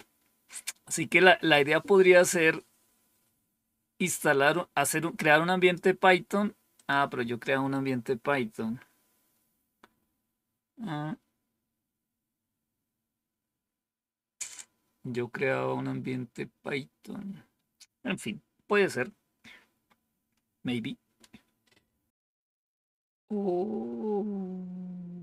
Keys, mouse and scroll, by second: 4.1-5.7 drag, 6.7 click.